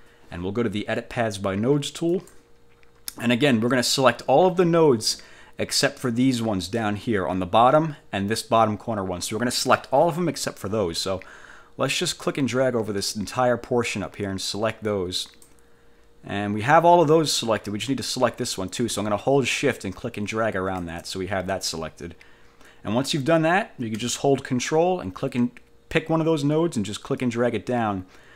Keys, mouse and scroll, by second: 2.3 click, 12.3-15.7 drag, 19.8-21.1 shift+drag, 27.3-28.3 ctrl+drag.